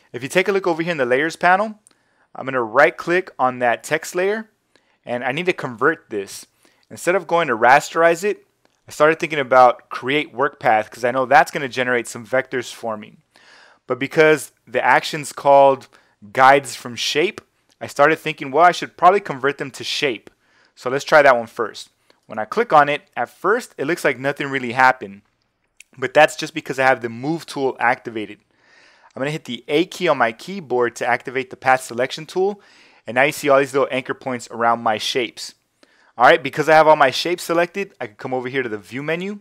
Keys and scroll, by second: 29.7 a.